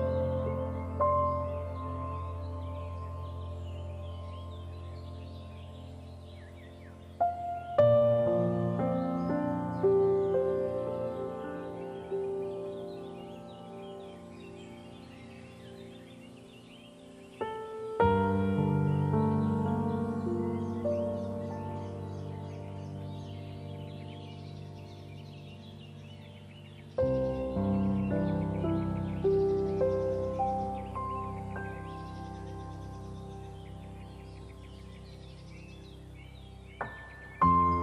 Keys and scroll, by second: 16.5 ctrl+z.